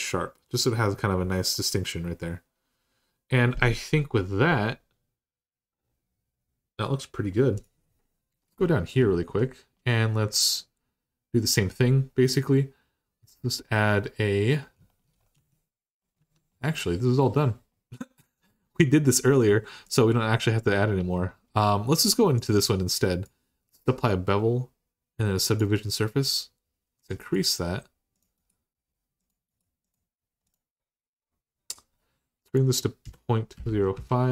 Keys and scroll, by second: 15.1 Tab, 16.0 Tab, 32.8-33.7 typing.